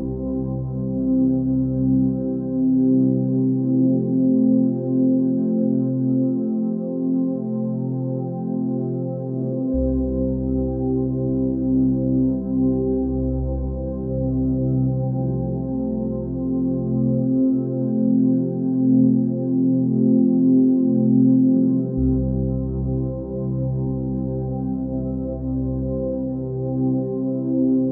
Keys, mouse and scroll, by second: 1.4 ctrl+z, 1.9 ctrl+shift+z, 4.3 ctrl+z, 7.7 ctrl+space, 18.6 ctrl+space, 22.3 ctrl+space, 23.1 click.